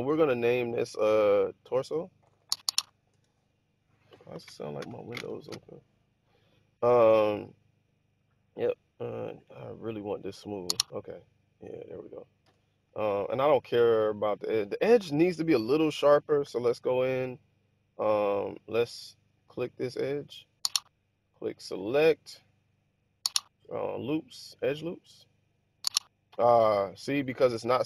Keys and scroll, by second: 1.9-3.2 typing, 12.4 1, 16.3 Tab.